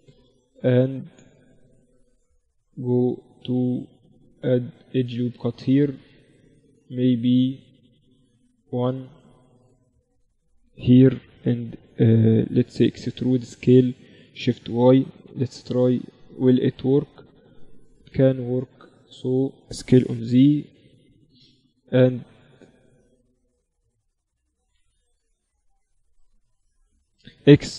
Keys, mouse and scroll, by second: 1.1 ctrl+r, 5.6 ctrl+r, 8.1-10.3 drag, 8.6-12.0 right drag, 8.9 z, 12.7 e, 19.5 s, 24.3 s, 27.1 x.